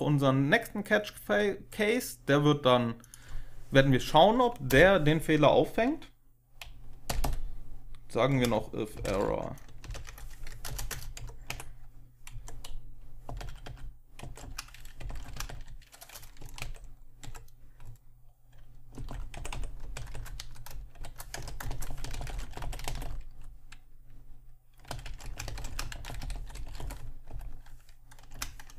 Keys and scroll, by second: 4.6 Return, 6.7-9.3 typing, 9.7 ctrl+alt+7, 9.8 ctrl+alt+0, 10.3 Left, 10.5 Return, 10.8 Return, 11.1 Up, 11.4 Tab, 12.2 Up, 13.1-15.7 typing, 14.1 Up, 14.1 Tab, 16.3 Down, 16.5 Tab, 17.1 Down, 18.6-23.4 typing, 24.5-28.2 typing.